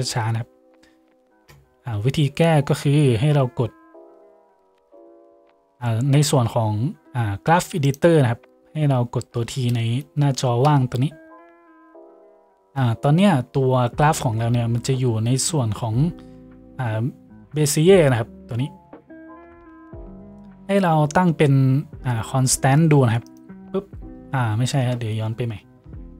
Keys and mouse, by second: 10.8 t, 14.4 t, 24.8 ctrl+z.